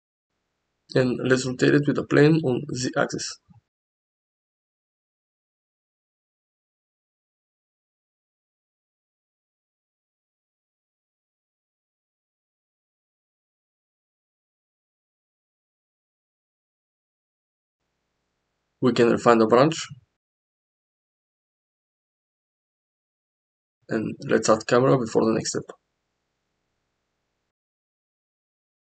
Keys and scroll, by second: 2.5 r, 2.8 z, 7.8 g, 10.2 g, 13.0 Tab, 13.4 1, 14.0 g, 15.9 g, 19.7 g, 22.1 g, 25.3 Tab, 25.9 shift+a.